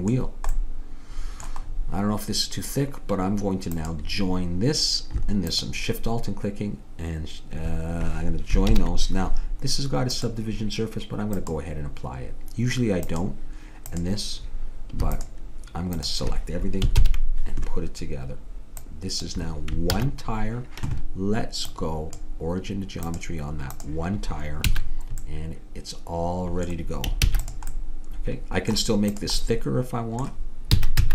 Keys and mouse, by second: 0.6-3.8 middle drag, 3.8-7.4 drag, 8.8 ctrl+j, 10.2-17.0 drag, 17.0 ctrl+j, 18.8-20.5 drag, 20.0 ctrl+z, 21.8-24.8 drag, 24.8 a, 27.3 ctrl+s, 29.2-30.5 middle drag, 30.8 s.